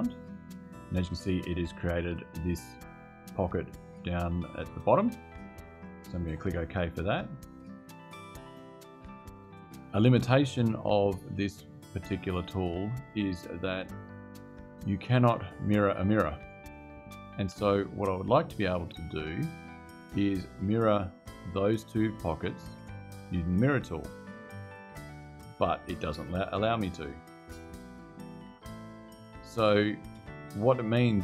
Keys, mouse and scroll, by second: 6.6 click, 21.6 click, 23.9 click, 27.8 click.